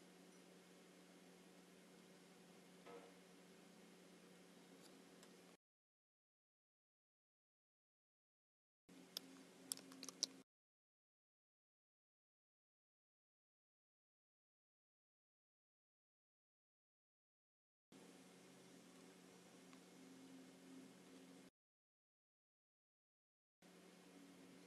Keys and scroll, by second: 8.1 super+c, 10.0 alt+super+b.